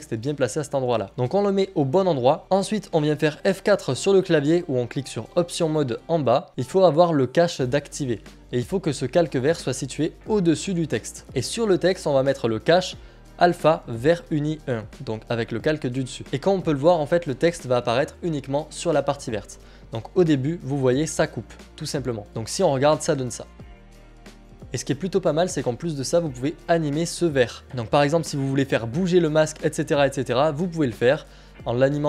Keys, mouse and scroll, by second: 1.1 click, 5.3 click, 5.9 click, 11.1 click, 15.4 click, 22.3 click, 24.6 click, 27.6 click, 31.9 click.